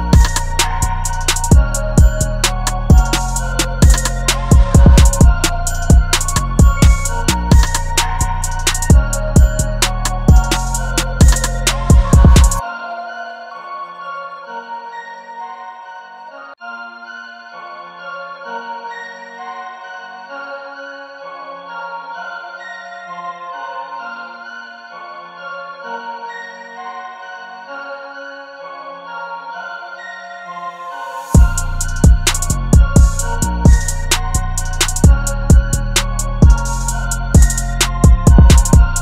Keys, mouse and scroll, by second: 6.5 double click, 9.5 e, 26.5 double click, 34.9 double click.